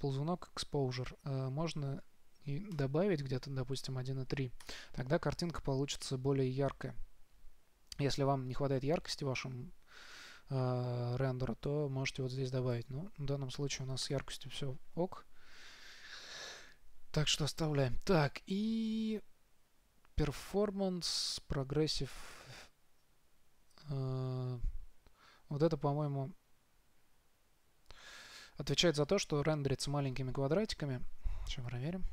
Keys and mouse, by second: 13.3-15.2 drag.